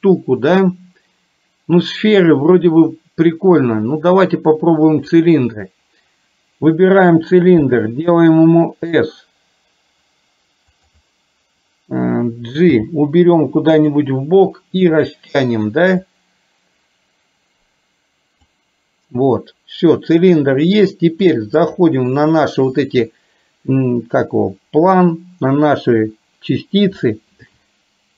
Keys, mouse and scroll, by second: 7.7 s, 12.9 g, 15.1 click, 16.1-18.7 drag, 21.6 click.